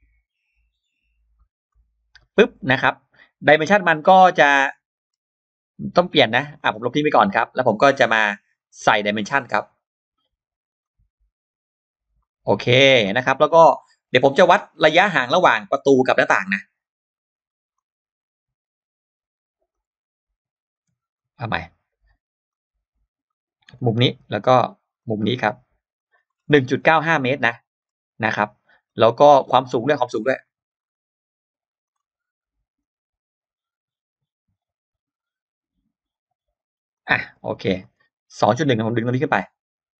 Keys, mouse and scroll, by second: 2.3-2.7 scroll up 2, 3.3-4.1 scroll down 4, 4.9-5.2 scroll up 2, 6.1 click, 6.8 click, 6.8 e, 7.5 click, 7.5 e, 9.6 click, 10.6 click, 12.0 click, 12.7 click, 14.5 middle click, 16.3 click, 17.6 click, 19.5 click, 21.0 click, 22.3 click, 23.5 click, 24.8 click, 25.8 click, 26.1 scroll down 1, 26.4 space, 26.7 scroll up 1, 27.0-27.4 scroll down 1, 27.6 scroll up 1, 28.7-29.0 scroll down 1, 29.2 scroll up 1, 30.1 click, 30.6 scroll up 1, 31.7 click, 32.6 click, 37.4 click, 37.8 click, 38.0-38.3 scroll up 2, 38.5-40.0 drag.